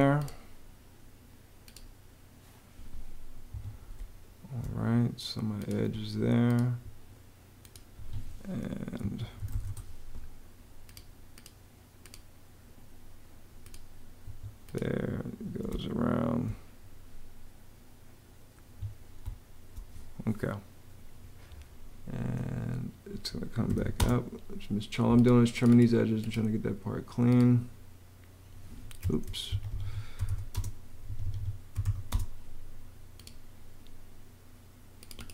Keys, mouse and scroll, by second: 3.3 Escape, 3.8 space, 5.9 Escape, 7.8 Escape, 8.7-9.8 typing, 14.0 Escape, 15.5 space, 18.9 Escape, 19.0 space, 23.2-24.1 typing, 28.9 super+z, 29.3 super+Escape, 29.7-32.1 typing, 30.9 Escape.